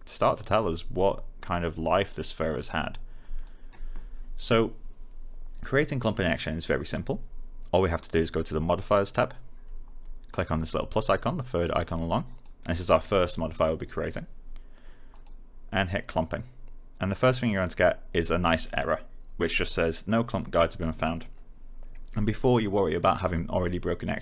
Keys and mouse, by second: 3.1 alt+click, 9.1 click, 12.2 click, 15.0 click, 17.4 click.